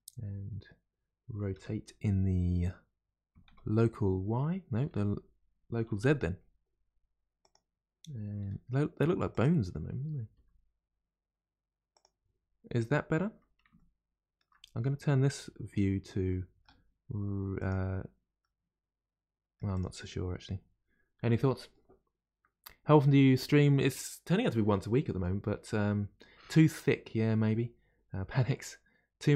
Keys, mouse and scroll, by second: 1.5 r, 8.4 r, 13.8-17.6 shift+middle drag, 17.6 click, 18.4-19.7 middle drag, 19.7 click.